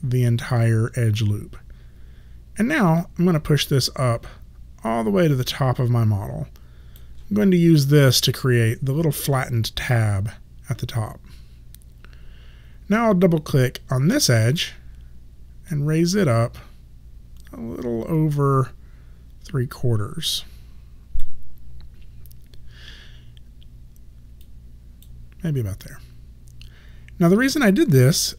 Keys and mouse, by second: 3.0 click, 14.4 click, 24.5 click, 28.0 alt+click.